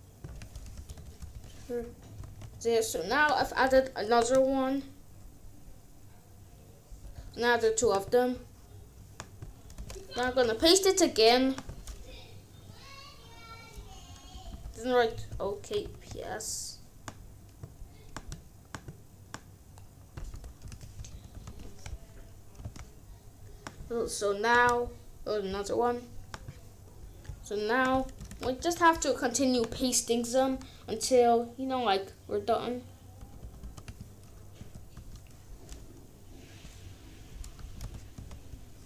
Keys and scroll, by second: 0.4-1.8 typing, 2.2 ctrl+s, 9.7 Return, 10.2 ctrl+v, 14.2 Left, 15.2 k, 15.8 ctrl+s, 20.4-21.8 typing, 22.5 ctrl+s, 28.2 Return, 28.5 ctrl+v, 33.1 BackSpace, 34.5 a, 34.9 b, 37.5 BackSpace, 37.8 p, 38.1 s.